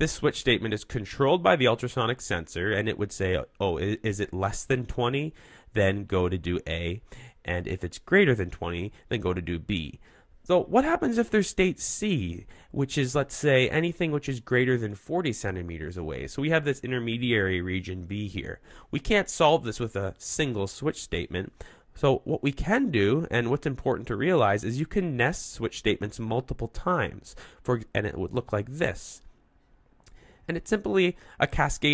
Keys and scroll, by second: 18.7 super+z.